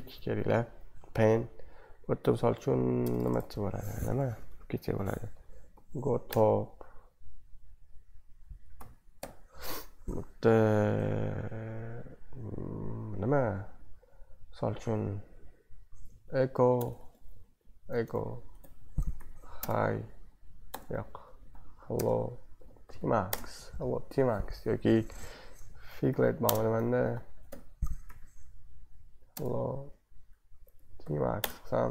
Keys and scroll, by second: 3.2 BackSpace, 3.3 BackSpace, 5.3-6.5 typing, 8.5-9.7 typing, 15.6-23.8 typing, 18.6 Left, 25.1-31.9 typing.